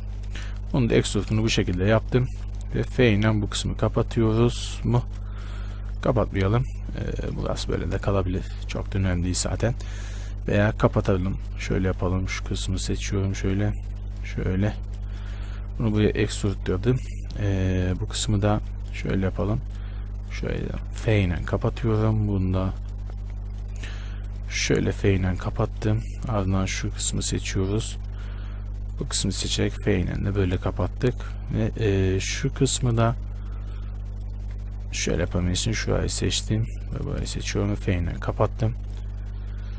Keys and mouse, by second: 2.9 f, 4.5 ctrl+z, 7.7 Tab, 9.3 Tab, 15.9 e, 20.9 f, 24.7 f, 29.5 f, 33.2-37.5 right drag, 37.5 f.